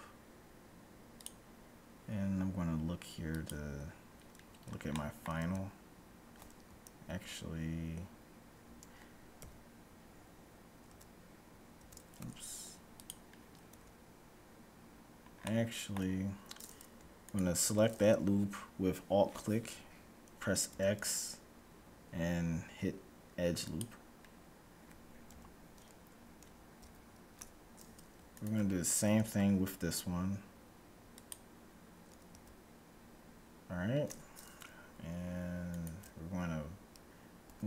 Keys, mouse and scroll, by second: 3.4-4.9 drag, 4.5 middle click, 4.9-6.9 middle drag, 5.4 Tab, 7.2 ctrl+z, 9.5 KP_1, 10.9 z, 11.9 z, 13.0-14.5 drag, 13.9 Tab, 15.0-17.0 middle drag, 17.2-19.0 right drag, 20.9 x, 25.4 KP_1, 26.9 a, 28.2-30.0 right drag, 29.2 x, 32.4 a, 35.5-37.4 right drag, 37.4 g.